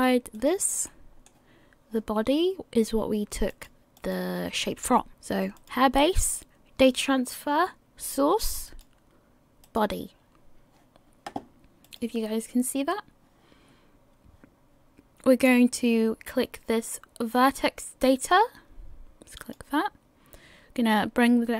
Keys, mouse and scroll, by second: 0.3 click, 0.9 middle click, 3.5 click, 4.0 click, 5.5 click, 19.4 click.